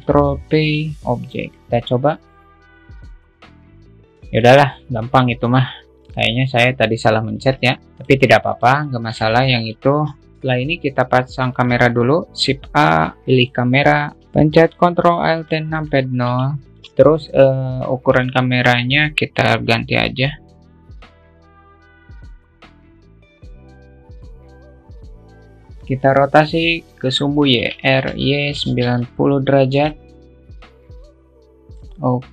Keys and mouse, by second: 0.3 ctrl+p, 1.7 click, 2.4-4.1 drag, 4.6-5.8 shift+middle drag, 6.0 alt+z, 6.0-7.3 alt+drag, 7.9 click, 9.0 shift+click, 9.4-9.8 middle drag, 10.0 drag, 10.3 shift+a, 12.3 shift+a, 16.6 ctrl+alt+q, 18.6 click, 19.8 click, 20.9-22.0 drag, 22.2-23.2 drag, 23.5 alt+middle click, 23.8 click, 24.5 shift+middle click, 25.1 q, 25.1 shift+middle click, 25.5-28.0 drag, 25.5 q, 28.0 r, 30.7 click, 31.4 click.